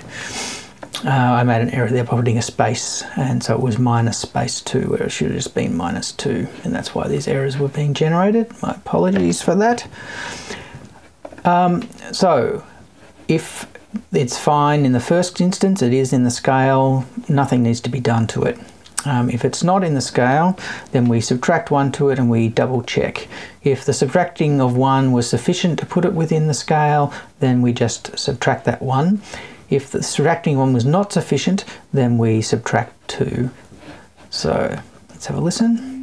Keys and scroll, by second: 9.6 Left.